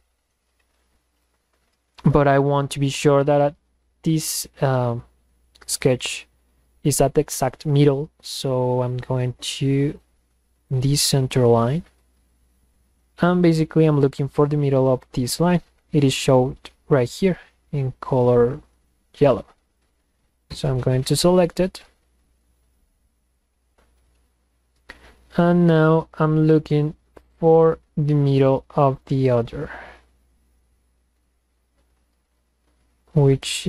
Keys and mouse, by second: 1.2 click, 9.0 drag, 9.9 click, 10.6 click, 19.7 click.